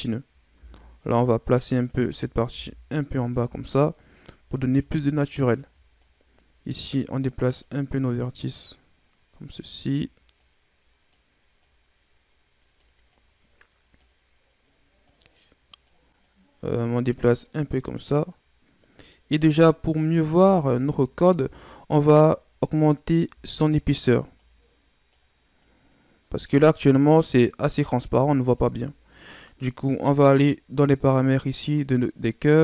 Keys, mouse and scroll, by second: 0.5 e, 2.0-2.4 scroll down 3, 2.4 e, 3.6-4.2 scroll up 1, 5.9 Right, 8.3 right click, 10.3 right click, 11.6 right click, 13.0 right click, 14.9 right click, 16.2 right click, 17.4 right click, 19.0 right click, 19.7-20.3 scroll down 5, 20.3 Tab, 21.6-22.4 scroll up 1, 22.5 scroll up 1, 23.2 Tab, 23.6-24.3 scroll up 2, 24.3 right click, 25.5 right click, 27.3 right click, 27.8 Tab, 28.1-28.8 scroll down 2, 28.8 scroll down 2, 29.1-31.0 middle drag, 31.0 click.